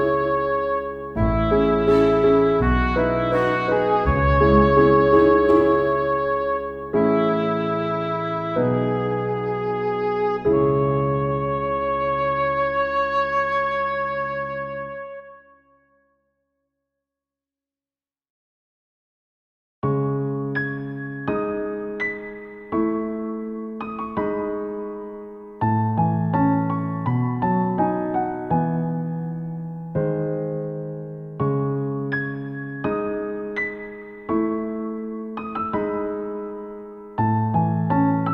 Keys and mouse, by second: 0.3 ctrl+z, 0.4 right click, 0.6 ctrl+z, 1.8 right click, 2.0 ctrl+z, 3.1 ctrl+z, 3.2 ctrl+z, 3.6 ctrl+z, 5.1 ctrl+z, 7.0 ctrl+z, 7.4 ctrl+z, 7.7 ctrl+z, 7.8 ctrl+z, 12.9 ctrl+z, 26.9 ctrl+z, 27.0 ctrl+z, 27.5 ctrl+z, 28.0 ctrl+z, 28.1 ctrl+z, 30.9 ctrl+z, 31.2 ctrl+z, 31.3 ctrl+z, 33.3 ctrl+z, 35.2 ctrl+z, 35.3 ctrl+z, 35.6 ctrl+z, 35.8 right click, 36.2 ctrl+z, 36.3 right click, 36.5 ctrl+z, 36.9 ctrl+z, 37.3 ctrl+z.